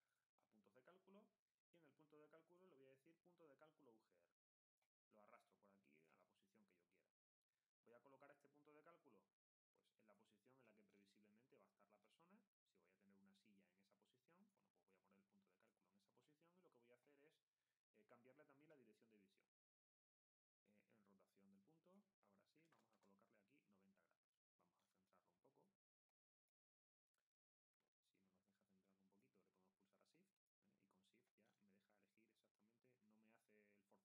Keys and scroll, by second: 22.3-23.2 typing.